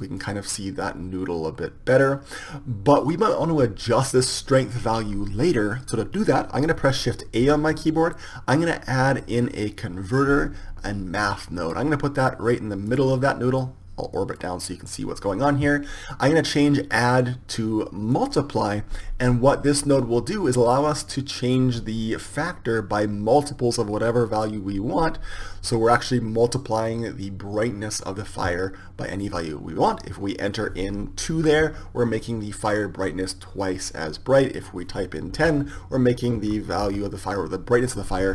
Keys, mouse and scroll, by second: 7.4 shift+a, 13.1-32.7 drag, 35.0-36.9 drag.